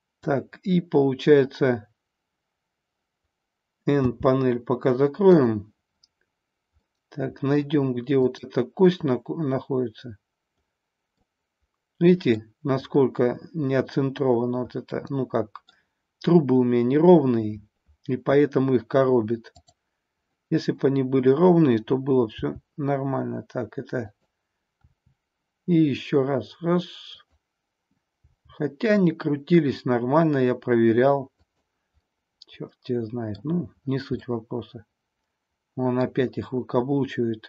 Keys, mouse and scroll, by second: 3.9 n, 6.8-7.5 middle drag, 8.1-11.0 drag, 11.2-12.4 middle drag, 14.9-15.7 middle drag, 19.6 click, 22.2 g, 24.1 click, 24.8 r, 27.2 click, 28.1 g, 31.4 click, 32.0-33.4 middle drag, 34.3-36.0 middle drag.